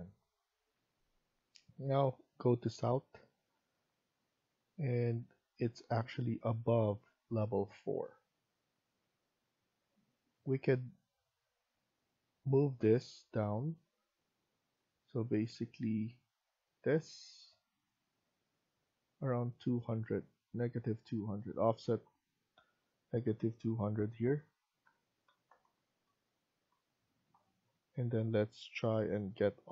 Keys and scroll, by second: 12.5 Escape, 24.7-27.7 typing, 26.5 Return.